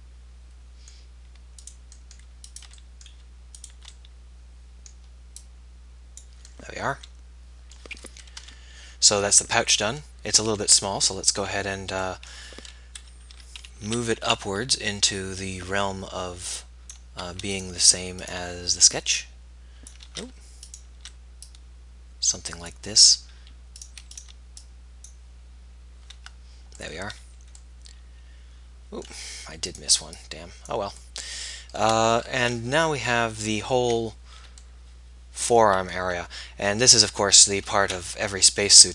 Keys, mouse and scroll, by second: 2.0-4.7 middle drag, 4.9-6.4 middle drag, 6.6 middle click, 7.9 middle click, 8.5 KP_1, 13.0 KP_1, 13.4 z, 13.8 a, 14.1 b, 20.8 ctrl+z, 27.1 z, 31.2-32.6 middle drag, 32.6 KP_1, 33.7 z, 38.2-38.9 typing.